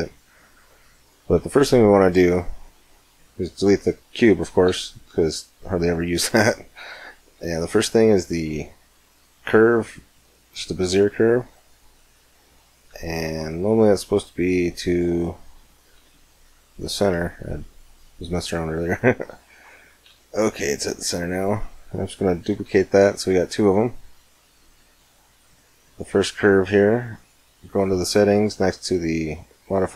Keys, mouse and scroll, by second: 1.3 shift+a, 4.5 shift+a, 11.4-12.8 middle drag, 12.9 shift+s, 17.0-22.8 middle drag, 22.4 shift+d, 22.8 click, 23.6-24.0 middle drag, 24.3-25.4 middle drag, 24.3-26.7 right drag, 27.0 click.